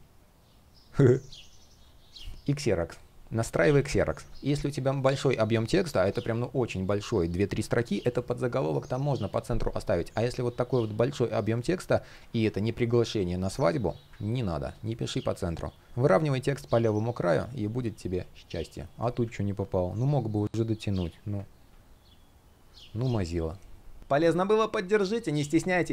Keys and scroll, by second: 2.1 shift+p, 6.7 super+z, 11.8 super+z, 19.5 shift+p.